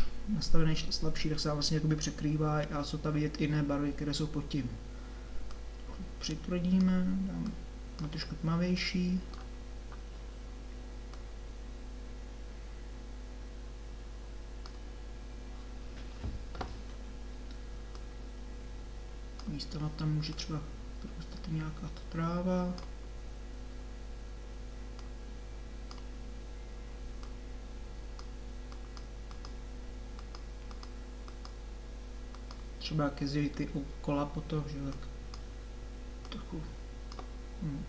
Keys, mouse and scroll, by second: 5.5-9.3 drag, 9.7-11.1 middle drag, 11.1-13.5 drag, 17.8-22.2 drag, 25.1-34.1 drag, 34.9-37.8 drag.